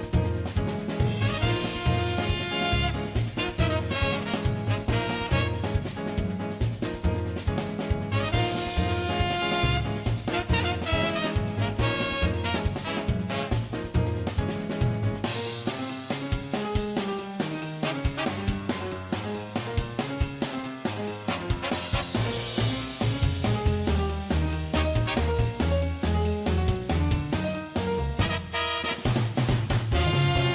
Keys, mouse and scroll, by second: 2.3 middle click, 2.4 middle click, 2.5 middle click, 3.1 shift+middle click, 3.4 shift+click, 3.6 alt+q, 3.6 middle click, 8.9 middle click, 9.1 middle click, 9.9 middle click, 10.3 1, 10.3 middle click, 10.5 right click, 10.5 middle click, 11.1 middle click, 11.4 right click, 11.6 g, 11.7 middle click, 11.9 middle click, 12.2 middle click, 12.9 middle click, 12.9 3, 13.0 s, 13.1 middle click, 13.2 middle click, 14.0 alt+q, 14.2 alt+q, 14.2 alt+q, 14.2 middle click, 14.4 click, 14.6 click, 15.0 middle click, 15.2 ctrl+z, 15.3 right click, 15.4-18.1 typing, 15.7 middle click, 16.0 middle click, 16.3 middle click, 16.8 middle click, 17.1 middle click, 18.0 middle click, 18.1 middle click, 19.3 middle click, 19.5 shift+right click, 20.0 middle click, 20.5 g, 20.6 g, 20.7 middle click, 20.9 Tab, 20.9 middle click, 21.1 middle click, 21.1 g, 21.3 middle click, 21.4 Tab, 21.6 middle click, 21.7 middle click, 21.8 middle click, 22.5 click, 22.5-22.9 g, 23.4 middle click, 23.8 3, 24.0 shift+click, 24.1 middle click, 24.5 alt+s, 24.6 alt+q, 24.7 Tab, 24.8 middle click, 24.8 Tab, 25.3 middle click, 25.3 s, 25.7 Tab, 25.7 g, 26.1 middle click, 30.1 middle click.